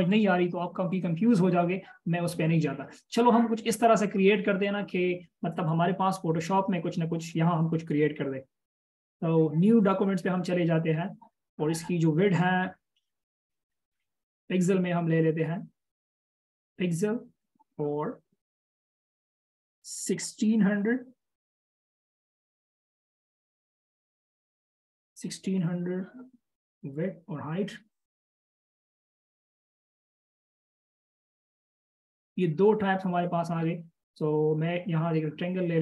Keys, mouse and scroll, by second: 4.9-5.8 scroll up 1, 20.9-21.8 typing, 24.4-24.8 typing, 28.6 typing, 30.0 typing, 31.1 Return, 34.4 right click.